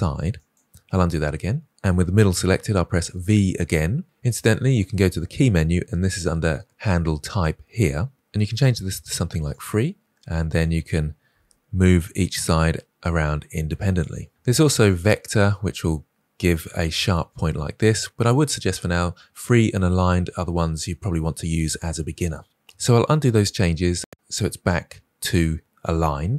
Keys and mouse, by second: 1.6 click, 4.0-8.1 drag, 8.1 ctrl+z, 8.1 v, 10.3-10.6 drag, 11.2 g, 22.5 ctrl+z, 23.1 ctrl+z, 24.1 click.